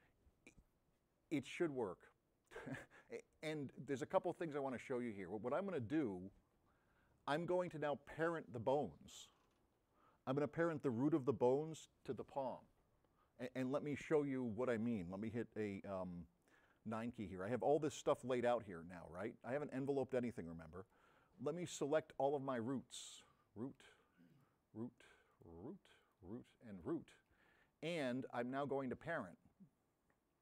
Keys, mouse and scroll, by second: 15.9 9, 20.3-21.2 drag, 21.5 middle click, 23.1 click, 24.3 shift+drag, 25.4 shift+drag, 26.1 shift+drag, 26.9 shift+click.